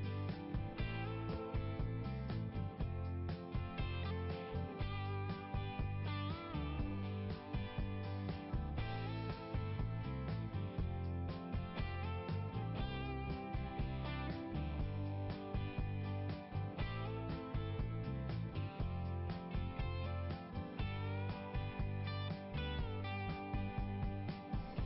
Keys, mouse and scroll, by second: 1.6 click, 3.2 click, 4.8 click, 6.5 click, 6.7 click, 7.1 click, 9.3 scroll down 1, 11.8 click, 12.0 click, 14.3 click, 15.5 scroll down 1, 18.3 click.